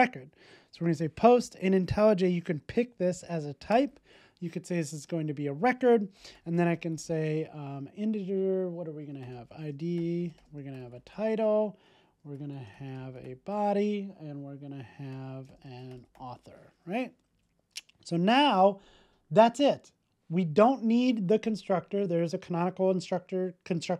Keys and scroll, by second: 17.7 super+s.